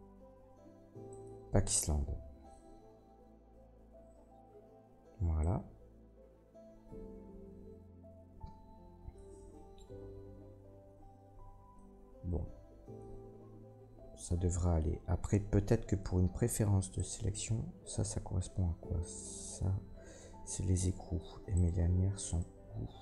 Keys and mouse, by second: 13.0-22.7 drag, 16.9 middle click, 16.9 right click, 18.5 l, 21.5 right click, 22.3 right click, 22.7 l.